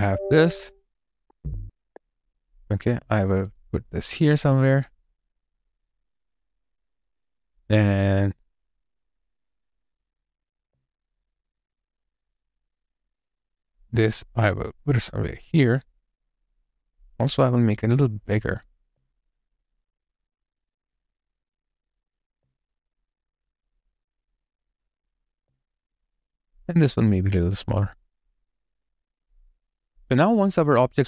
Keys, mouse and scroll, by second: 4.2 alt+click, 10.5 alt+click, 18.7 alt+click, 22.2 alt+click, 25.2 alt+click, 25.5 alt+right click, 25.8 alt+click.